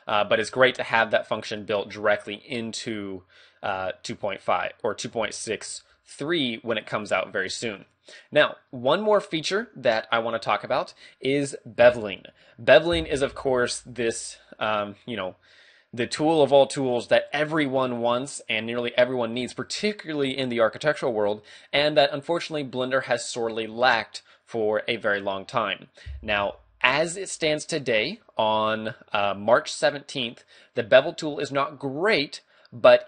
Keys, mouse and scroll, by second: 0.6 ctrl+e, 5.3 shift+middle click, 6.0 scroll down 1, 6.5 middle click, 30.7 right click.